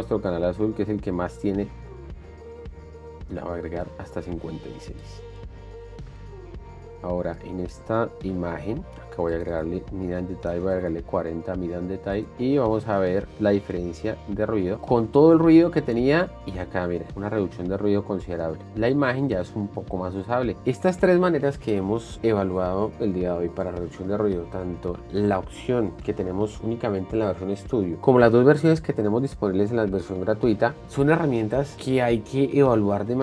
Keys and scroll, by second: 10.9 KP_0, 10.9 Return, 14.3 shift+d, 16.7 shift+d, 18.8 d.